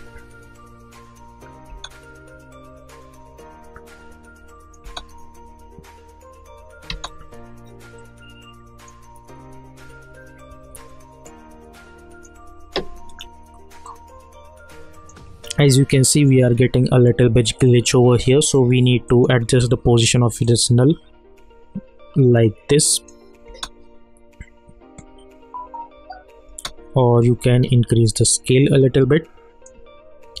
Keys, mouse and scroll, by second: 1.7 space, 3.8 click, 4.8 space, 6.9 space, 8.0-10.0 drag, 10.0 -, 10.9-17.3 drag, 19.1-23.4 drag, 23.4 space, 26.4 space, 28.1-30.4 drag.